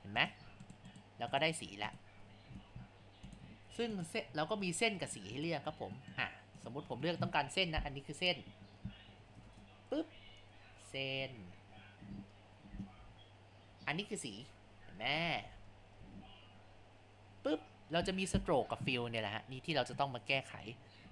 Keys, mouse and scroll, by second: 4.4-5.1 scroll.